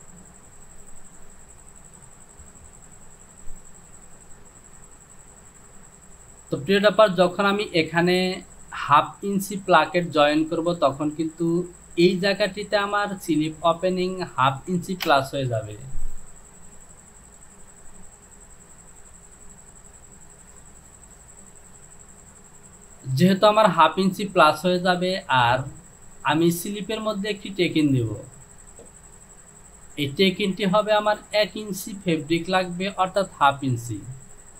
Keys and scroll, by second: 15.2 Return.